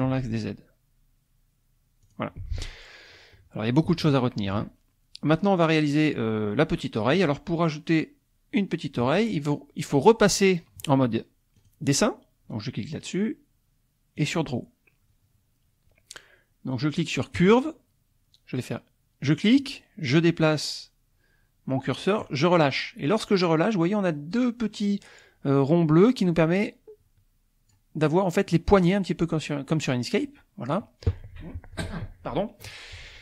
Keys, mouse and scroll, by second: 0.1 z, 2.1 click, 4.1 shift+middle click, 11.6-13.0 drag, 14.2 click, 17.5 click, 19.6-22.4 drag, 26.3-27.9 drag, 28.5-30.9 drag.